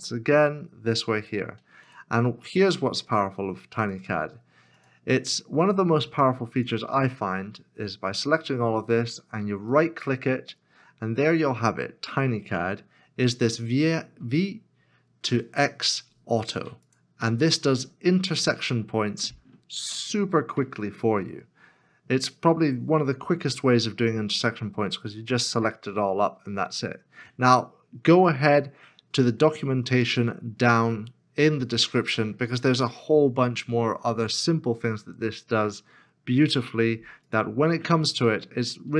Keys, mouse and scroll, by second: 0.1 e, 9.7 right click, 28.1 right click, 38.2 right click, 38.8 middle click.